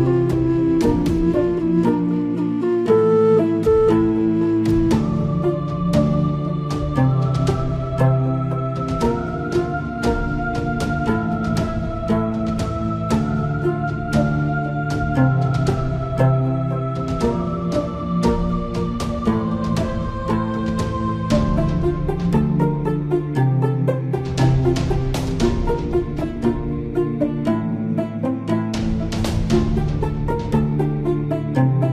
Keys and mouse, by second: 1.5 middle click, 2.9 KP_7, 9.7-11.8 drag, 19.3-20.4 drag, 21.2-22.4 middle drag, 29.9-31.0 middle drag.